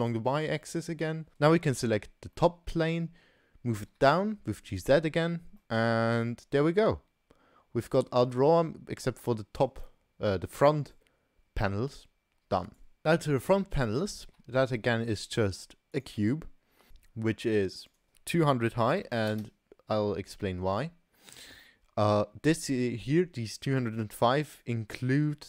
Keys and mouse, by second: 0.5-1.1 middle drag, 2.4 middle drag, 2.6 drag, 2.6 right drag, 3.8 g, 5.0-5.4 drag, 5.0-5.4 right drag, 5.6-6.5 drag, 5.6-6.5 right drag, 6.5-8.4 middle drag, 12.6 click, 14.3 shift+a, 17.9-20.0 drag, 19.4 0.